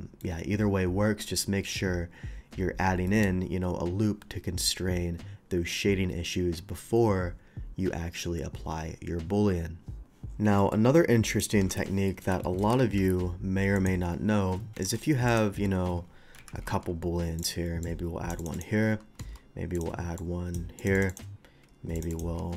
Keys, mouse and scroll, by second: 3.0 middle drag, 10.6 middle click, 11.3 click, 11.6 Delete, 12.1 middle click, 12.4 shift+middle drag, 12.8 shift+a, 13.8 click, 14.8 alt+v, 15.3 click, 16.4 KP_3, 16.7 d, 16.8 KP_3, 17.4 click, 17.8-18.3 drag, 18.4 click, 18.5 click, 19.7 click, 20.2-20.5 drag, 20.8 click, 21.0 click, 21.1 click, 21.9 click, 22.1 click.